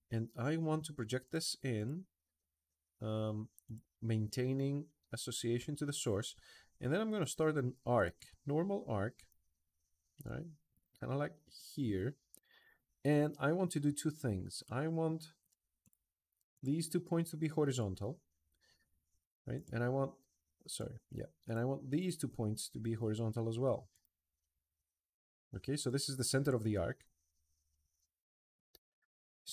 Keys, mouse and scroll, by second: 1.0 click, 1.5 click, 3.4 click, 6.9 a, 7.7 click, 8.9 click, 10.5 click, 15.6 click, 16.3 click, 19.3 click, 20.4 click, 21.2 click, 21.7 click, 23.7 click, 25.2 Escape, 25.4 Escape, 25.6 click, 27.6-28.6 drag, 29.4 click.